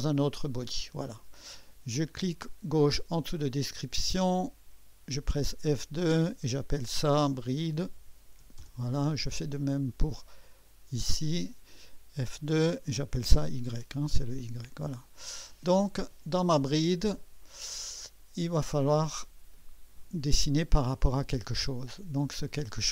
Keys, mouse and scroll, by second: 0.0 click, 4.2 click, 7.2-8.9 typing, 10.6-12.7 drag, 12.7 F2, 13.0-13.7 typing, 15.0-22.9 drag, 19.7-20.5 typing.